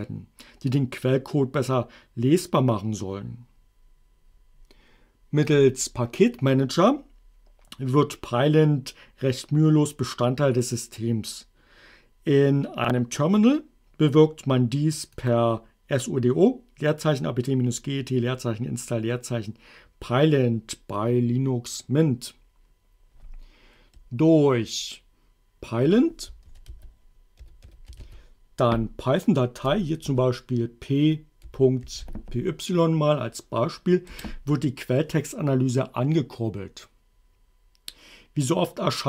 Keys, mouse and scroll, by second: 5.5 click, 15.3 click, 24.0 BackSpace, 26.3-28.5 typing, 29.7 space, 30.0 p, 31.2-32.6 typing, 34.1 Return.